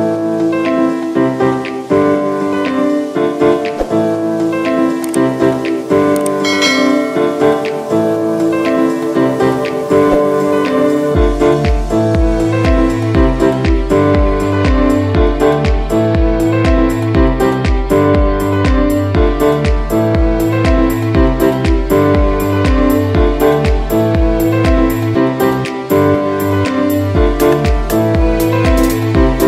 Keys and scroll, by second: 0.0-1.1 typing, 2.3 space, 3.6 space, 4.1 space, 5.9-13.7 typing, 14.9 space, 16.4 ctrl+z, 18.1 ctrl+z, 22.2 space, 23.2 ctrl+z, 23.5 ctrl+z, 25.2 space, 26.0 space, 27.3 space, 27.4 ctrl+z, 28.3 ctrl+z, 28.7 space, 28.8 ctrl+z, 29.3 space.